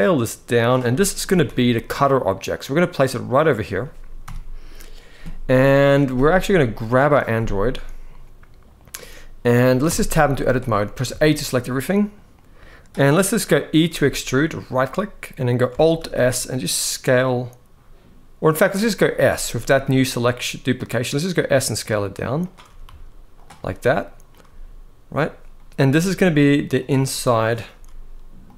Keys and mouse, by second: 0.4 click, 0.6 middle click, 1.0 g, 1.2 y, 4.0 KP_1, 7.7-8.6 middle drag, 9.6 Tab, 9.9 middle click, 10.1 z, 10.8 a, 11.2 middle click, 13.6 e, 15.7 alt+s, 19.0 s, 22.1 click, 22.4 s, 22.6 z, 23.1 click, 23.3 middle click, 24.2 z, 26.8 middle click, 27.5 s, 28.2 click, 28.4 middle click.